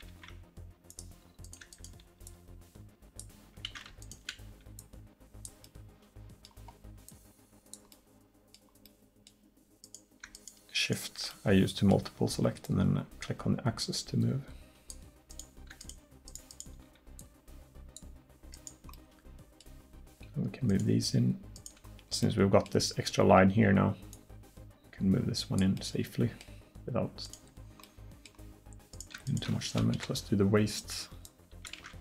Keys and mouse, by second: 0.1 ctrl+z, 0.9 click, 3.7 ctrl+z, 5.7-6.9 middle drag, 7.2-8.2 middle drag, 8.2 click, 12.7-14.6 drag, 14.6 middle click, 15.3-17.2 drag, 21.9 click, 24.2-26.0 drag, 26.0 middle click, 27.3 right click, 27.3 click, 30.0 KP_1, 31.3 click, 31.8 ctrl+z.